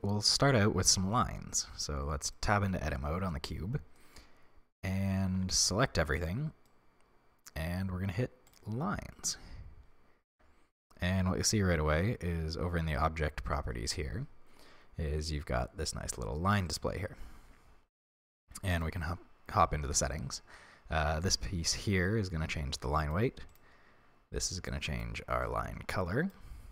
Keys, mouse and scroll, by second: 1.7 Tab, 4.0-4.4 scroll up 1, 5.2 a, 8.5 click, 10.3 Tab, 11.3-15.4 scroll down 1, 16.7 click, 18.8 click, 19.6-20.7 scroll down 1, 21.0-23.6 drag.